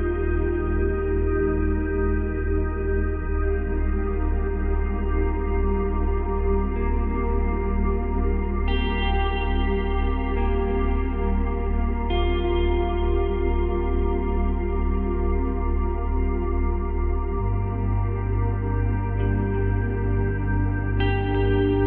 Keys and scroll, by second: 1.7 space, 5.1 space, 7.2 space, 8.7 space, 14.2 space, 16.9 space, 19.2 space.